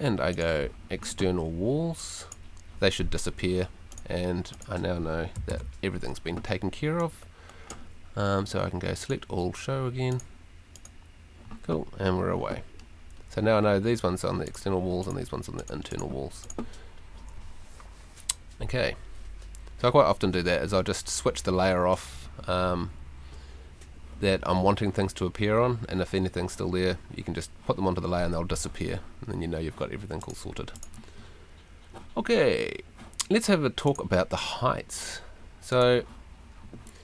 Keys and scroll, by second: 5.5 super+l.